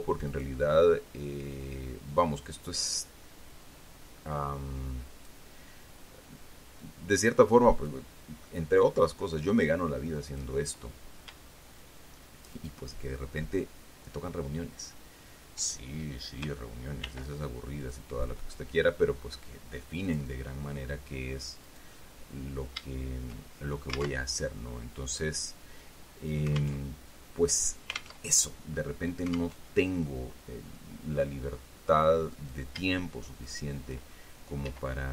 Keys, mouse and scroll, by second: 0.6 right click, 1.6-5.8 drag, 7.1-8.4 drag, 9.1-10.9 drag, 12.9 shift+right click, 17.4 ctrl+r, 18.1 click, 20.4 click, 22.0 right click, 24.5 alt+Tab, 27.1 alt+Tab, 28.5 alt+Tab, 29.9 alt+Tab, 32.6 right click, 33.8 shift+right click, 35.0 e.